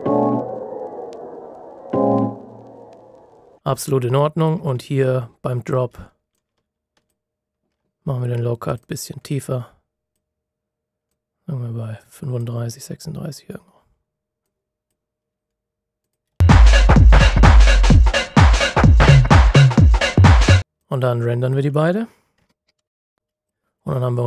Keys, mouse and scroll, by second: 3.6 space, 4.3 click, 4.7-6.3 ctrl+scroll up 3, 6.3 click, 9.0 scroll up 1, 9.2 click, 13.1-13.6 scroll up 1, 13.6-14.4 scroll down 1, 14.4 click, 16.2 space, 16.8 click, 22.8 ctrl+shift+b, 23.4 click.